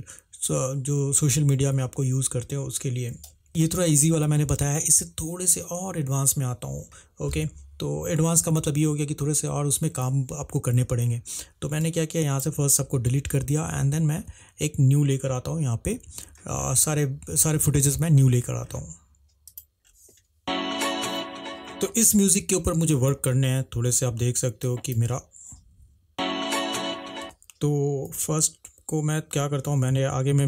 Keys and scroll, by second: 14.3 Delete, 19.9 space, 22.0 space, 25.2 space, 28.2 c, 29.7 =, 29.9 =.